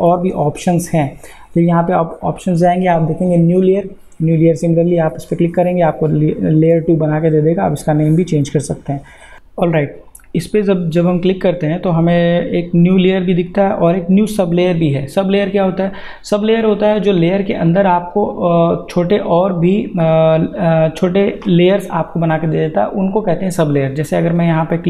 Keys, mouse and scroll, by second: 3.7 click, 10.1 click, 17.7 click.